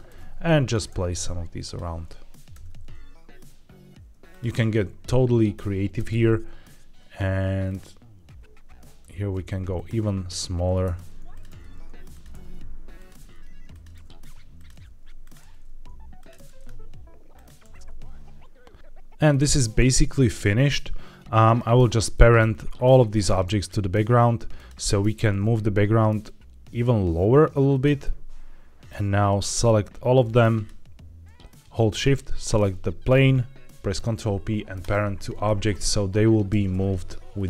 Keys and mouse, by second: 0.0 alt+d, 0.5 click, 0.8 alt+d, 1.5-2.3 drag, 2.4 alt+d, 4.2-5.4 drag, 5.9 alt+d, 7.6-8.9 drag, 8.9 s, 10.8 alt+d, 11.2 click, 11.4 alt+d, 12.0 click, 12.2 alt+d, 12.9 click, 13.1 alt+d, 13.6 click, 13.9 alt+d, 14.7 alt+d, 15.1 click, 15.4 alt+d, 16.3 alt+d, 17.2 click, 17.5 alt+d, 18.7 click, 19.2-21.4 middle drag, 22.0 middle click, 24.5 click, 25.2 g, 25.3 z, 27.6 click, 27.9 middle click, 29.2-30.5 drag, 32.0 shift+right click, 32.4-33.0 middle drag, 33.8 ctrl+p, 35.6 click, 36.4 g, 36.6 y, 37.2 Escape.